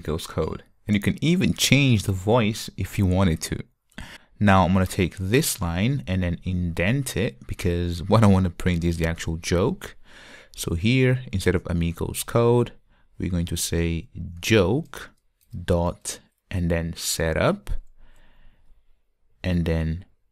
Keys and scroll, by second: 8.0 Tab, 15.1 Return, 17.0 Return.